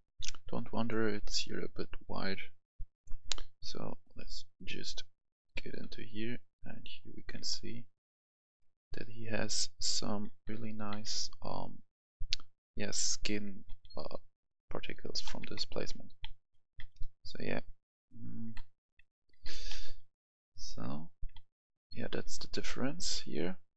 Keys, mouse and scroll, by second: 0.1 F10, 0.8-3.8 drag, 5.2 right click, 5.5 w, 5.9-6.5 w, 6.7 w, 7.3 w, 10.0 a, 10.4 w, 10.8 w, 12.0 typing, 13.2-23.6 typing.